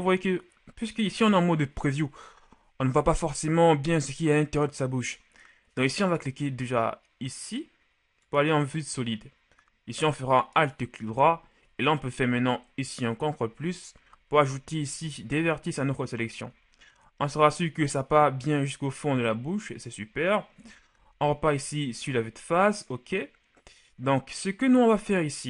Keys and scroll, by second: 12.5 ctrl+KP_Add, 15.0 z, 20.7 KP_1, 21.0 z.